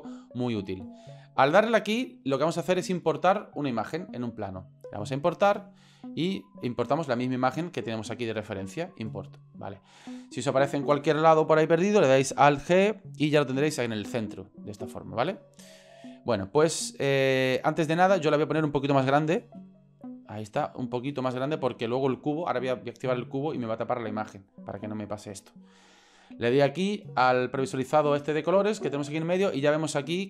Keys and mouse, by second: 12.5 alt+g, 14.6 right drag, 15.3-15.9 middle drag, 17.8 middle click, 18.2 right click, 19.7 s, 27.5 click, 27.6 click, 29.7-30.2 middle drag.